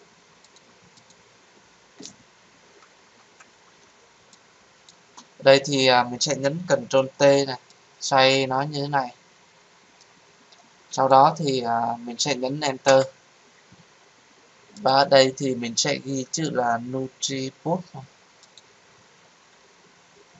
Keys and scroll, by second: 7.0 ctrl+t, 12.8 Return.